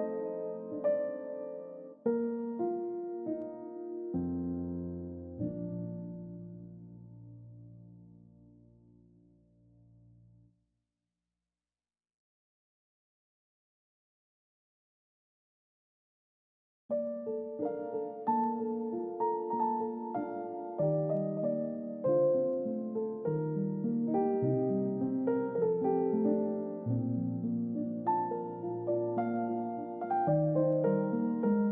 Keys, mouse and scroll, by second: 6.3-6.6 scroll down 1, 8.9 alt+click, 10.0 scroll down 1, 10.5 scroll up 1, 16.1 middle click, 16.6-17.8 scroll down 1, 17.8 scroll up 1, 20.9 ctrl+d, 22.9 space, 25.9 middle click, 29.3 middle click, 31.1 space.